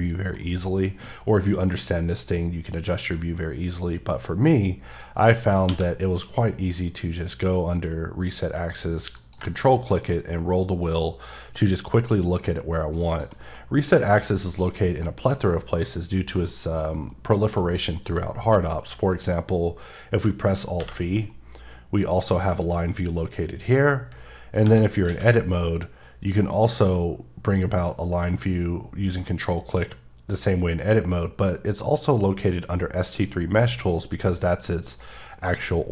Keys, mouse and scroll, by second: 9.4 click, 10.0-10.4 scroll up 2, 10.8-12.2 scroll up 4, 12.4 scroll up 1, 13.1 click, 13.5 middle click, 15.0 middle click, 15.6 KP_1, 17.1 middle click, 18.0 middle click, 20.8 alt+v, 24.1 Escape, 25.1 q.